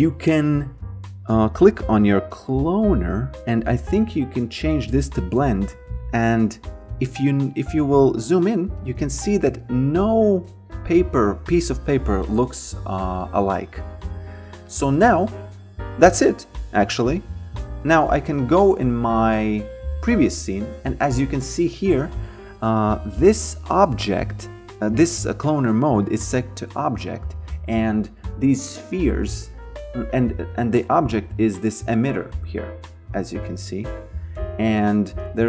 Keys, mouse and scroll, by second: 4.0 click, 7.8 alt+middle click, 9.3 alt+click, 10.1 alt+middle click, 10.8 alt+right click, 13.3 alt+middle click, 14.7 click, 17.9 v, 21.5 click, 28.4 click, 33.0 click, 33.8 alt+right click, 34.4 alt+middle click.